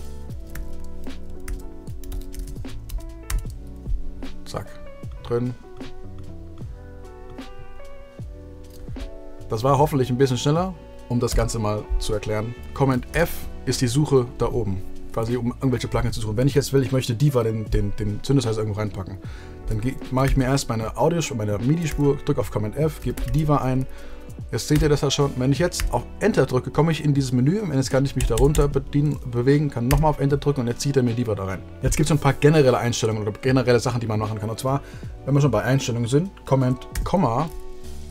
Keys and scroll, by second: 0.5 super+f, 1.4 super+f, 1.7-2.9 typing, 11.2 BackSpace, 13.0 super+f, 21.8 super+f, 22.7-24.7 typing, 25.7 Return, 28.1 Down, 29.8 Return, 36.8 super+,.